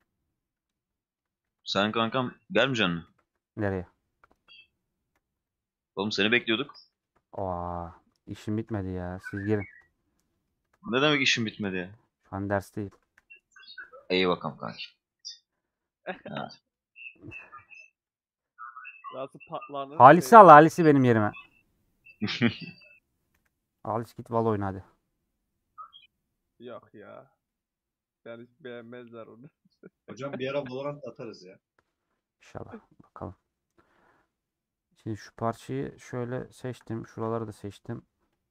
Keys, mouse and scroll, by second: 0.4 middle click, 1.3 Tab, 2.3 middle click, 3.0 KP_Decimal, 3.7-4.1 scroll down 1, 6.5-7.8 middle drag, 7.8 click, 7.9 middle click, 8.7-9.2 scroll down 1, 9.6 alt+click, 10.0-11.0 middle drag, 11.0 c, 12.7 middle click, 13.0 c, 15.1-17.6 middle drag, 17.6 a, 17.9 click, 18.2-20.7 middle drag, 20.7 c, 32.6-36.1 middle drag, 36.1 alt+shift+click, 37.2-38.4 middle drag.